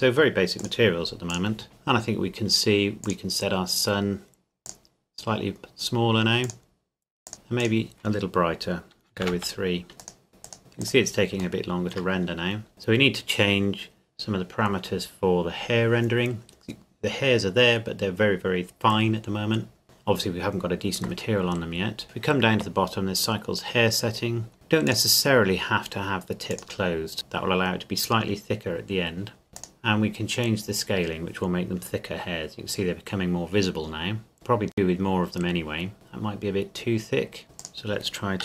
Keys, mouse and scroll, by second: 2.0-2.4 scroll down 1, 2.4-3.1 scroll up 1, 3.1 click, 9.2 KP_3, 9.3 KP_Enter, 10.0 click, 10.4 click, 11.6 shift+middle click, 12.3-12.7 scroll up 1, 13.5 scroll up 1, 19.8 click, 21.1-22.1 scroll down 1, 24.9 click, 29.5 click, 34.3 click, 35.9-37.4 scroll down 1, 37.4 scroll up 1, 37.6 click.